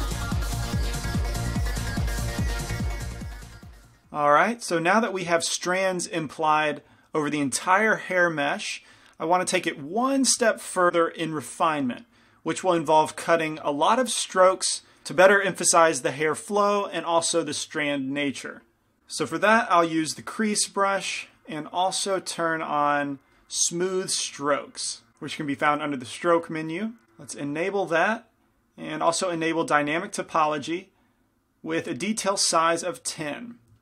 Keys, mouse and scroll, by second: 0.3 f, 0.6-2.6 drag, 2.6 middle click, 4.3-5.5 middle drag, 7.8-10.9 middle drag, 12.6-19.0 middle drag, 20.3 shift+c, 21.5-23.4 drag, 23.5-25.1 drag, 27.2-32.9 drag, 32.9 middle click.